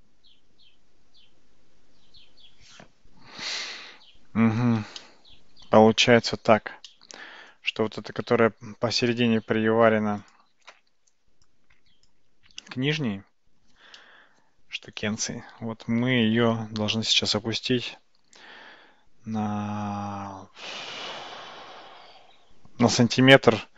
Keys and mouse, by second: 5.1-5.9 shift+middle drag, 6.9-7.6 middle drag, 10.3 click, 10.9 Tab, 11.5 click, 14.1-16.2 middle drag, 17.1 g.